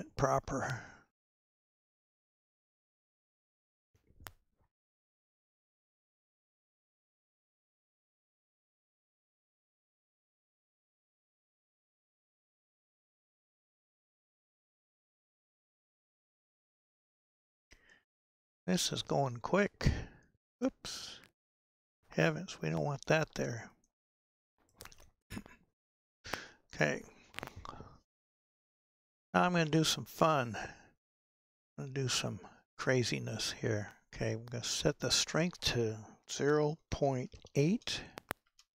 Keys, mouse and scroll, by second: 4.3-6.1 middle drag, 6.1-8.9 drag, 8.9-12.0 middle drag, 12.0-16.3 drag, 16.3-16.9 scroll down 3, 16.9-19.9 middle drag, 21.8-23.1 drag, 23.1-23.8 scroll down 2, 23.8 scroll down 1, 23.9-24.8 middle drag, 24.8-26.4 scroll up 4, 26.4 KP_1, 38.5-38.7 drag.